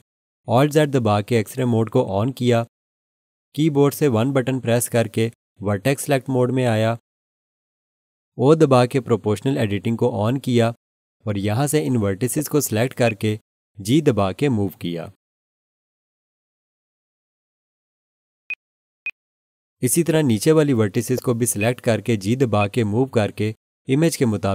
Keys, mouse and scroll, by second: 0.9 alt+z, 4.6 1, 9.9 o, 12.2-13.0 scroll up 1, 13.0 click, 15.0 g, 18.5 click, 19.9-20.4 scroll up 1, 20.4 scroll, 21.0-21.4 scroll down 1, 21.4 scroll, 21.6 alt+shift+click, 22.6 click, 24.3 g.